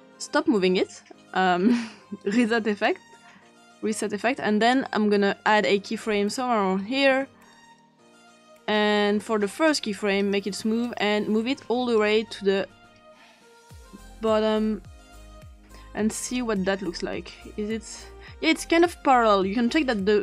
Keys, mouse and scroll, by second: 2.2 click, 2.7 click, 5.5 click, 7.8 click, 9.6-10.6 drag, 12.0-15.6 drag, 16.2 click, 16.9 click.